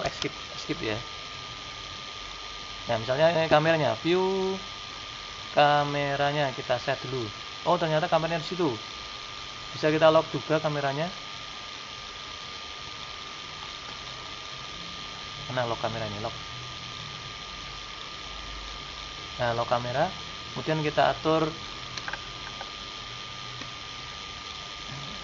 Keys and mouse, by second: 0.0 Escape, 9.9-11.9 drag, 11.9-19.8 middle drag, 19.8-21.7 drag, 23.6-25.2 drag.